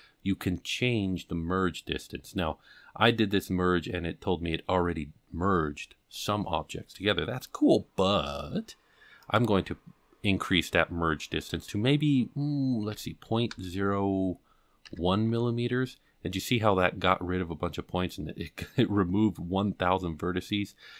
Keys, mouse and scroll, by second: 9.2-16.0 drag.